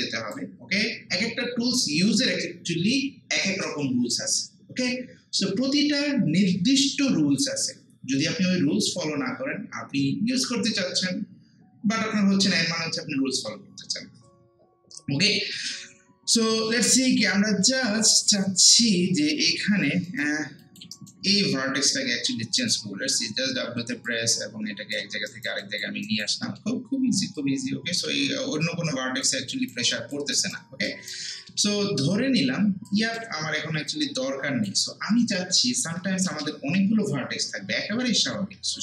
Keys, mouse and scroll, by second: 17.1 scroll up 1, 17.7 middle click, 18.0 alt+right click, 19.6 alt+click, 20.1 alt+right click, 20.6 alt+click, 20.9 alt+right click, 21.3 alt+middle click, 22.6 click, 22.9 w, 24.1 click, 25.3 alt+right click, 25.6 alt+click, 26.1 alt+right click, 26.5 alt+middle click, 27.4 click, 28.6 alt+click, 29.5 alt+right click, 29.9 alt+click, 30.4 alt+right click, 31.3 middle click, 31.5 alt+middle click, 32.9-35.6 drag, 35.6 ctrl+z, 37.8 ctrl+z.